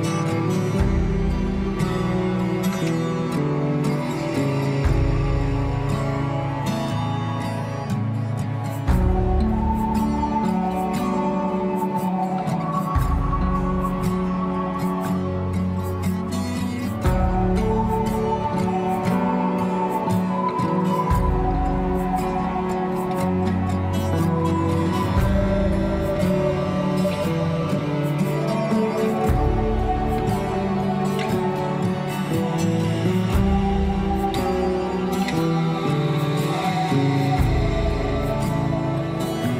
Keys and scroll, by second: 15.5 alt+w, 22.1 alt+w, 34.0 ctrl+z.